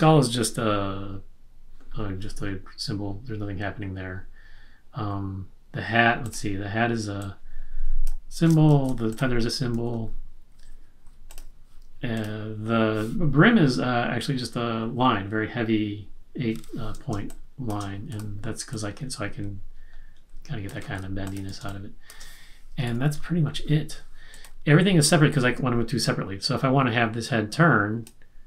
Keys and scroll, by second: 8.7 z, 9.7 super+z, 11.2 v, 17.1 space, 20.8 super+z, 21.6 space, 22.8 super+-.